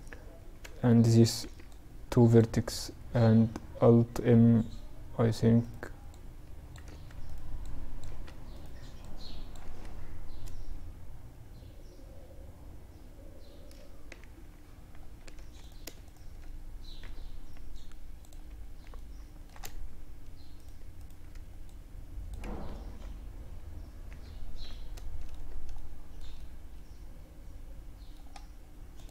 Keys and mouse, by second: 0.5 b, 3.4 z, 4.7-9.6 right drag, 5.2-9.8 drag, 6.0 ctrl+z, 7.2 ctrl+z, 8.7 ctrl+z, 13.3 ctrl+r, 14.7-16.1 drag, 16.1 x, 18.1-19.7 middle drag, 19.7-22.7 right drag, 20.8-22.7 drag, 21.8 ctrl+r, 23.8-28.1 middle drag, 28.1 click, 28.4 middle click, 29.0 click, 29.0 right click.